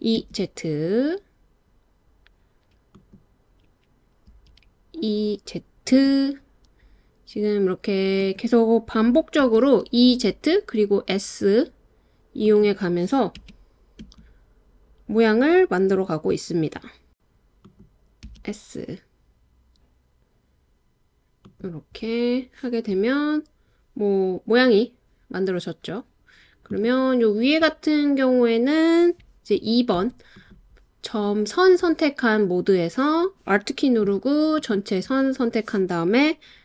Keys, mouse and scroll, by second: 0.2 z, 2.9 click, 4.3 e, 5.9 z, 8.2 click, 9.4 s, 12.4 click, 13.4 e, 14.0 z, 14.2 Escape, 14.7 e, 15.6 z, 17.6 click, 18.2 s, 21.4 click, 26.7 click, 29.9 2, 30.3 click, 34.7 alt+click.